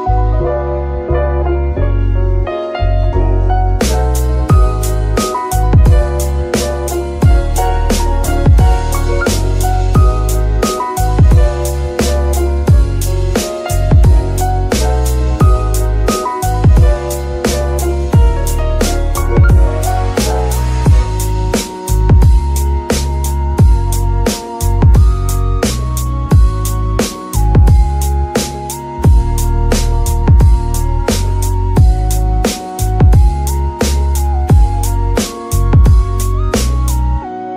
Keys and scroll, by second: 0.1 KP_2, 0.2 Return, 2.2 KP_0, 2.4 KP_Decimal, 2.5 KP_1, 2.6 Return, 5.4 KP_0, 5.6 KP_Decimal, 5.7 KP_1, 5.7 KP_5, 6.3 Return, 12.7 space, 15.6 g, 15.6 y, 16.3 Escape, 18.4 g, 19.2 Escape, 19.5 g, 19.6 y, 20.4 Escape.